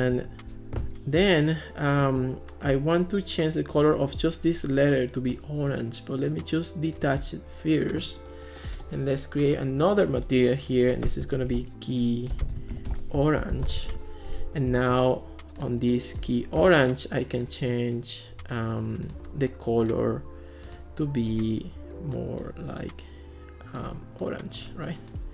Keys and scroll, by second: 11.4-14.3 typing.